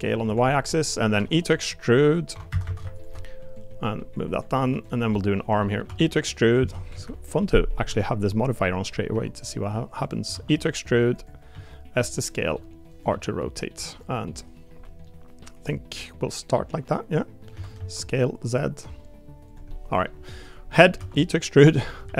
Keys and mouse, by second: 0.7 middle click, 1.2 e, 2.3 2, 2.5 a, 2.6 a, 2.9 alt+shift+click, 3.6 click, 4.6 3, 4.8 click, 5.1 middle click, 5.6 middle click, 5.8 e, 7.8 r, 9.1 g, 10.3 e, 11.5 s, 12.4 r, 13.1 g, 15.0-17.4 middle drag, 17.5 s, 19.7 middle click, 20.7 middle click, 21.0 e, 22.0 s.